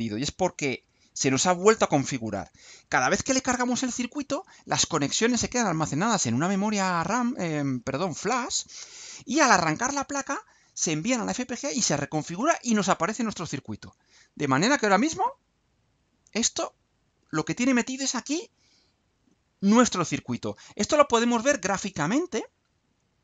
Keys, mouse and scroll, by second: 21.5 click, 23.1 click.